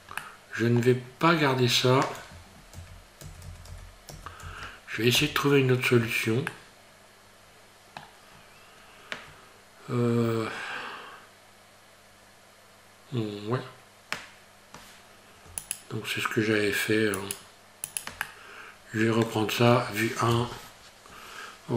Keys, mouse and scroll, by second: 0.2 middle click, 1.1 scroll up 3, 1.6 Tab, 2.8 ctrl+z, 3.3 ctrl+z, 3.5 ctrl+z, 3.7 ctrl+z, 4.1 ctrl+z, 4.6 ctrl+z, 5.1 ctrl+z, 6.5 middle click, 8.3 scroll up 2, 15.6 ctrl+right click, 17.2 ctrl+right click, 17.9 ctrl+right click, 18.2 middle click, 20.3 KP_1.